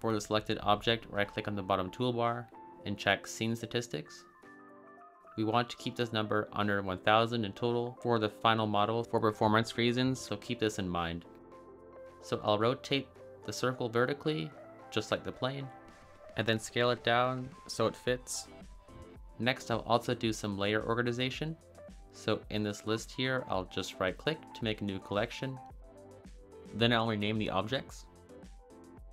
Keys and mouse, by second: 2.4-6.8 drag, 12.3 r, 13.0 x, 13.8 9, 14.3 0, 14.7 Return, 15.5 s, 18.5 click, 23.7 click, 24.2 click, 25.4-26.6 drag, 26.9 click, 27.6 ctrl+z, 28.3-29.1 drag.